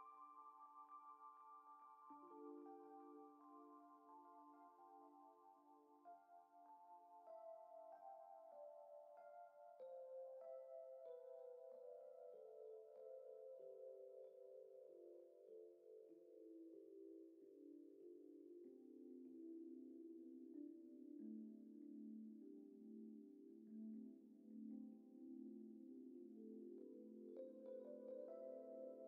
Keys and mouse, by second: 1.3 F6, 2.0 click, 2.8 drag, 3.5 click, 5.3-5.8 drag, 6.2 middle click, 6.8 click, 7.5 click, 8.2 middle click, 8.7 middle click, 9.2 click, 9.3 Tab, 9.8 click, 10.2 shift+d, 10.6 p, 11.1 Tab, 11.2 click, 11.8 s, 12.9 s, 13.5 g, 14.4 shift+click, 14.9 ctrl+j, 15.6 Tab, 15.9 click, 16.2 g, 16.9 ctrl+Tab, 17.2 middle click, 18.6 click, 19.3 click, 19.9 click, 21.7-23.1 drag, 23.7 shift+middle click, 24.2 Tab, 24.4 middle click, 25.1 middle click, 26.6 alt+shift+click, 27.0 shift+middle click, 27.8 alt+shift+click, 28.6 alt+shift+click.